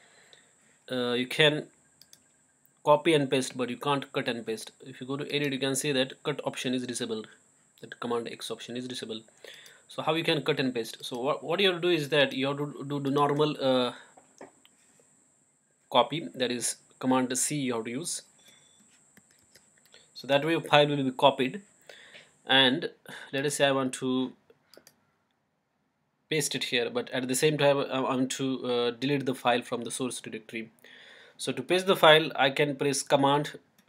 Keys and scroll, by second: 19.4 super+c.